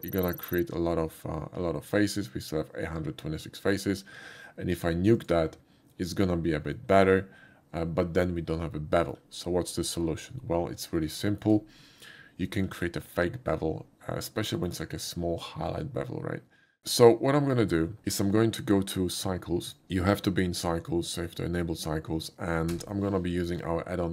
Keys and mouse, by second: 5.2 click, 6.7 middle click, 7.2-9.1 shift+middle drag, 11.2 middle click, 11.9 shift+middle click, 12.4 shift+middle click, 14.6 middle drag, 19.7 click, 20.3 click, 23.1 n.